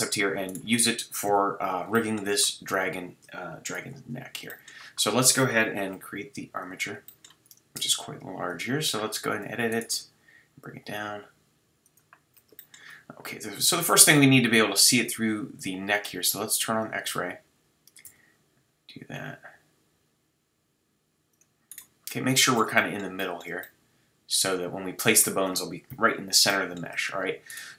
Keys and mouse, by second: 1.2 KP_3, 3.7 shift+c, 5.8 shift+a, 7.7 Tab, 9.9 g, 12.1-19.0 drag, 18.1 g, 21.7-25.9 middle drag, 25.9 KP_3, 26.5-27.7 middle drag.